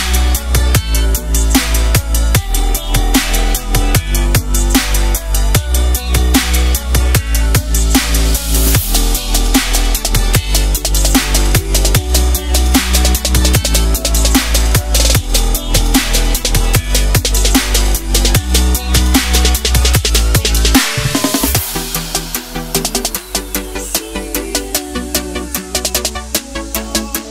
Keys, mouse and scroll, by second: 0.0-1.8 typing, 2.0 click, 10.0 alt+click, 11.0 ctrl+c, 11.2 click, 11.5 ctrl+v, 12.3 click, 12.8 Left, 14.1-14.6 scroll down 1, 14.6 click, 15.8 KP_Add, 16.4-17.1 scroll down 1, 17.5 KP_9, 19.0 Return, 19.2 KP_Add, 19.3 KP_9, 20.3-20.8 scroll down 1, 20.8 click, 24.6 alt+Num_Lock, 25.0 alt+Tab, 25.8 click, 26.4 ctrl+c, 27.0 ctrl+v.